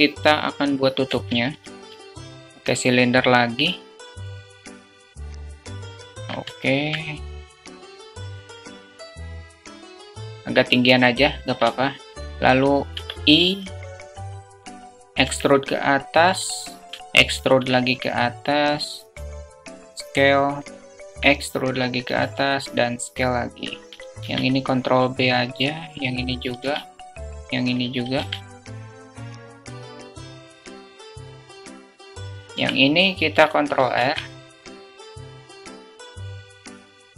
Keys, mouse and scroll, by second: 1.4 shift+a, 2.9 click, 4.4 alt+z, 4.6 click, 4.8 s, 6.0 alt+shift+z, 6.0 alt+click, 6.3 alt+shift+drag, 8.2 alt+shift+click, 8.3 Tab, 8.4 alt+z, 11.5 shift+middle click, 12.7 i, 14.3 alt+middle click, 15.0 e, 16.8 middle click, 16.9 alt+z, 16.9 `, 17.3 e, 18.9 s, 20.9 e, 22.0 s, 24.0 ctrl+b, 26.1 click, 27.5 click, 27.6 click, 28.0 ctrl+b, 28.9 ctrl+b, 29.6 ctrl+b, 29.9 middle click, 30.1 alt+shift+middle click, 30.3 alt+shift+middle click, 30.6 Tab, 30.7 `, 31.2 q, 31.5 alt+shift+middle click, 32.1 alt+shift+click, 32.4 Tab, 33.9 ctrl+r, 34.0 ctrl+r, 35.0 alt+shift+click, 36.5 Tab.